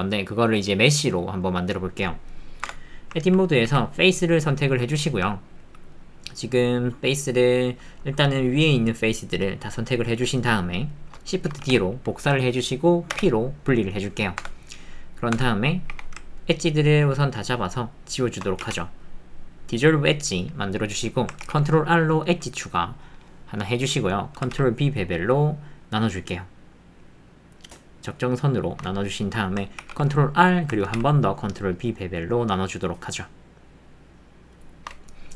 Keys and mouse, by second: 2.3 click, 3.2 ctrl+middle click, 4.8 click, 5.0 click, 5.2 alt+click, 5.5 alt+middle click, 5.9 click, 7.4-11.6 alt+middle drag, 11.6 shift+d, 13.1 p, 15.9 2.